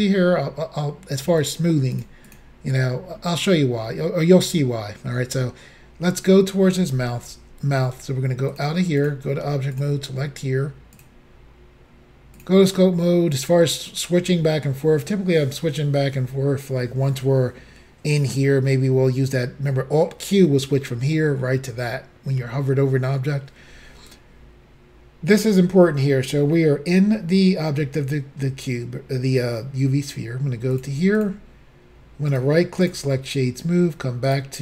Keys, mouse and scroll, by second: 0.0 shift+double click, 1.4 shift+click, 2.0 shift+click, 2.3 shift+click, 3.2 middle click, 5.5 shift+middle click, 8.6 click, 8.6 click, 9.1 click, 9.8 double click, 9.9 double click, 11.0 click, 11.1 click, 30.8 click, 30.9 click, 31.2 click, 31.3 click, 32.4 right click, 32.9 click, 34.3 click.